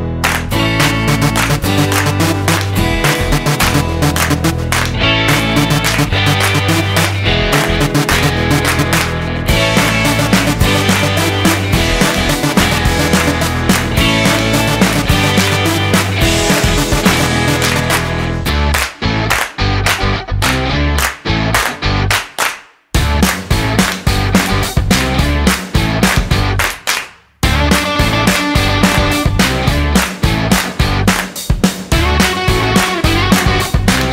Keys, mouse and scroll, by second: 7.7 ctrl+b, 11.5 click, 26.9 click.